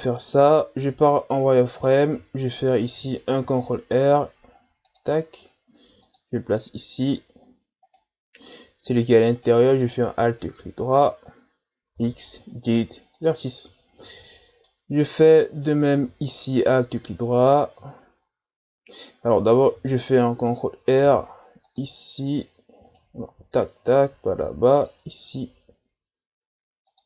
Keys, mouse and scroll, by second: 0.9 z, 1.7-3.4 middle drag, 3.4 ctrl+r, 7.9 right click, 9.3 alt+right click, 10.3 alt+right click, 12.0 x, 14.7-16.6 middle drag, 16.6 alt+right click, 19.8 z, 21.0 ctrl+r, 23.2 ctrl+z, 24.3 ctrl+r.